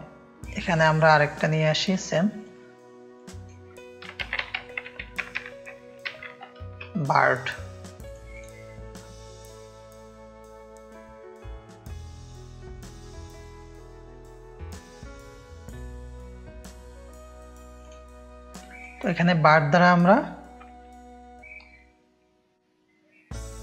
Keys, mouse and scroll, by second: 2.0 drag, 2.3 click, 3.1 click, 4.0-7.1 typing, 7.3 scroll up 1, 8.0 click, 8.3 click, 9.3 click, 9.6 shift+click, 10.4-13.5 drag, 14.0-15.7 drag, 15.9 click, 16.5 click, 17.6-19.1 drag.